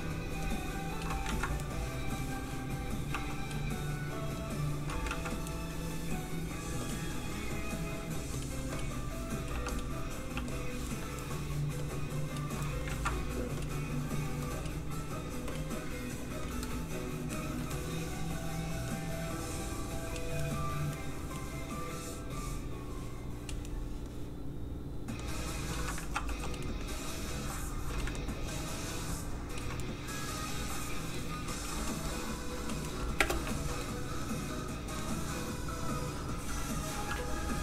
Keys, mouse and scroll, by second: 1.2 ctrl+z, 1.7 middle click, 3.1 f, 3.4 click, 5.1 ctrl+z, 6.8 click, 6.8 middle click, 9.5 f, 9.7 click, 10.3 f, 10.5 click, 10.9 middle click, 11.8 click, 12.6 middle click, 12.9 ctrl+z, 13.6 click, 17.3 shift+middle click, 17.7 middle click, 17.8 middle click, 18.9 click, 20.4 middle click, 22.4 click, 23.6 middle click, 25.2 click, 26.0 ctrl+z, 26.4 f, 26.4 click, 26.6 middle click, 27.2 click, 28.1 ctrl+click, 29.8 click, 29.9 middle click, 31.6 f, 31.8 click, 32.8 middle click, 33.2 space, 33.5 shift+middle click, 33.8 middle click, 33.9 middle click.